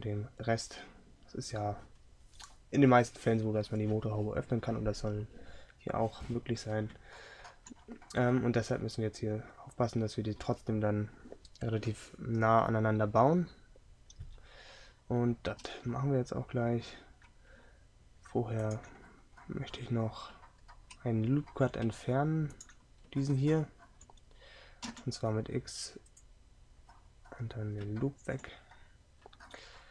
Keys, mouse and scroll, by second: 19.1-21.2 drag, 23.9-26.9 drag.